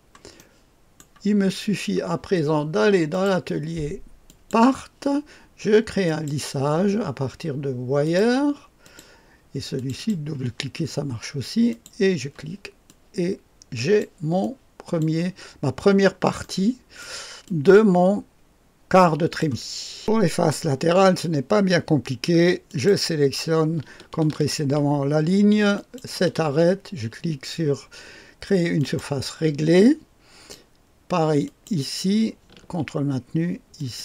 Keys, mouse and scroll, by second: 0.3 right click, 1.2-3.1 scroll down 1, 3.1 click, 4.2 click, 6.0 click, 8.0 click, 8.8 click, 9.7 click, 9.9 click, 11.6 click, 12.8-15.8 drag, 15.8-16.4 scroll down 1, 16.4-19.4 right drag, 19.4 click, 22.6 click, 25.7 ctrl+click, 28.7 click, 29.7 click, 31.4 click, 33.7 ctrl+click.